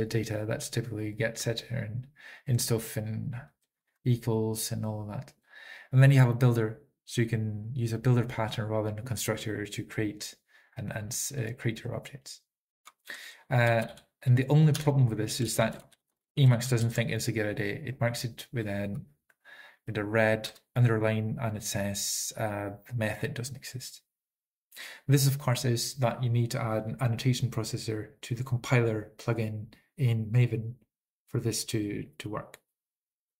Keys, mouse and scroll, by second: 1.3 ctrl+p, 1.3 ctrl+n, 1.3 ctrl+e, 1.3 ctrl+a, 1.3 alt+<, 1.3 alt+>, 1.3 ctrl+g, 1.3 ctrl+s, 1.3 Up, 1.3 Return, 1.3-1.7 typing, 1.7 ctrl+p, 1.7 ctrl+n, 1.7 ctrl+e, 1.7 ctrl+a, 1.7 alt+<, 1.7 alt+>, 1.7 ctrl+g, 1.7 ctrl+s, 1.7 Up, 1.7 Return, 3.6 Right, 3.6 Down, 5.3 Down, 5.3 Up, 14.0 ctrl+n, 15.6 ctrl+p, 15.6 ctrl+a, 15.6 ctrl+n, 15.6 alt+<, 15.6 alt+>, 15.6 ctrl+g, 15.6 ctrl+s, 15.6 Up, 15.6 Return, 15.6 ctrl+e, 15.6 Right, 15.6 Down, 15.6 alt+f, 15.6 typing, 16.4 alt+f, 16.4 ctrl+p, 16.6 alt+f, 16.9 ctrl+p, 16.9 ctrl+n, 16.9 alt+<, 16.9 alt+>, 16.9 ctrl+g, 16.9 ctrl+a, 16.9 ctrl+s, 16.9 Up, 16.9 ctrl+e, 16.9 Right, 16.9 Down, 16.9 typing, 20.0 alt+b, 20.0 Down, 25.7 typing, 26.9 ctrl+p, 26.9 alt+<, 26.9 alt+>, 26.9 ctrl+g, 26.9 ctrl+a, 26.9 ctrl+s, 26.9 Up, 26.9 ctrl+n, 26.9 Return, 26.9 ctrl+e, 26.9 Right, 26.9 alt+f, 26.9 typing, 27.9 ctrl+p, 27.9 alt+<, 27.9 alt+>, 27.9 ctrl+g, 27.9 ctrl+a, 27.9 ctrl+s, 27.9 Up, 27.9 ctrl+n, 27.9 Return, 27.9 ctrl+e, 27.9 Right, 27.9 alt+f, 27.9 typing, 29.3 ctrl+p, 29.3 alt+<, 29.3 alt+>, 29.3 ctrl+g, 29.3 ctrl+a, 29.3 ctrl+s, 29.3 Up, 29.3 ctrl+n, 29.3 Return, 29.3 ctrl+e, 29.3 Right, 29.3 Down, 29.3 alt+f, 29.3 alt+b, 29.3 typing, 30.6 ctrl+p, 30.6 alt+<, 30.6 alt+>, 30.6 ctrl+g, 30.6 ctrl+a, 30.6 ctrl+s, 30.6 Up, 30.6 ctrl+n, 30.6 Return, 30.6 ctrl+e, 30.6 Right, 30.6 alt+f, 30.6 typing.